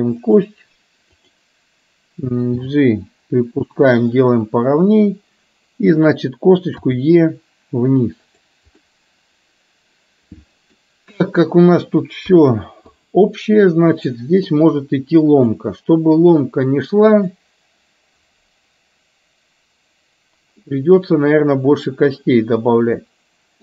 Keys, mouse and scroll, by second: 1.2 click, 3.5 g, 7.0 e, 9.0-10.8 middle drag, 12.3 KP_3, 13.2 click, 14.5-15.5 drag, 17.2 click, 20.8-23.6 middle drag.